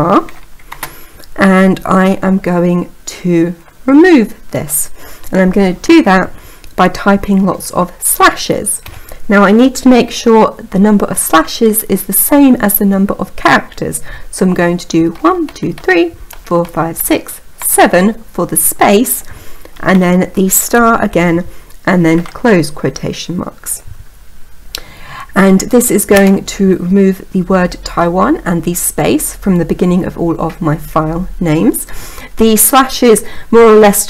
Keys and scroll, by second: 26.0 Return.